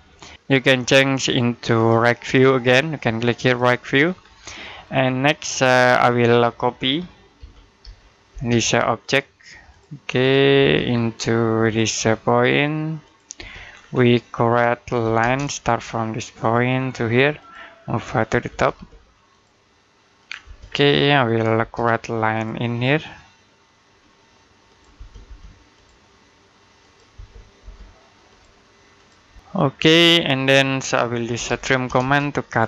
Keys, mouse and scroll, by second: 0.2 Escape, 0.4 typing, 1.6 click, 1.6 typing, 3.9-4.4 scroll down 1, 4.4 middle click, 4.9-5.5 scroll up 1, 5.5 middle click, 7.2-8.1 typing, 8.5 click, 10.4 space, 10.7 scroll down 1, 11.0 middle click, 11.5 click, 13.5-14.1 scroll up 1, 14.1 middle click, 14.9 l, 15.1 space, 16.2 click, 18.3 space, 19.1 click, 20.3 space, 20.5 scroll down 1, 20.7 middle click, 21.1-21.4 scroll up 1, 21.4 space, 22.2 click, 24.8 space, 25.6 click, 27.0 space, 28.1 click, 29.1-31.7 typing, 29.6 scroll down 1, 30.2 middle click, 32.3 click.